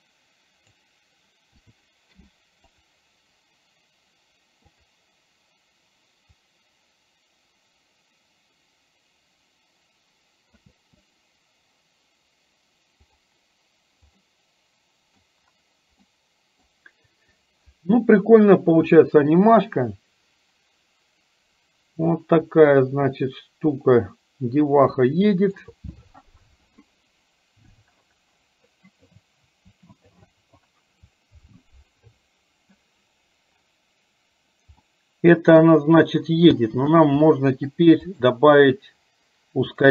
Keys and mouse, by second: 0.0 click, 6.5-10.8 drag, 10.8 space, 13.7 click, 14.6 middle click, 16.3 middle click, 23.0-25.6 middle drag, 25.7 middle click, 35.1 middle click, 36.6 space, 37.3 middle click, 38.0 click, 39.7 click.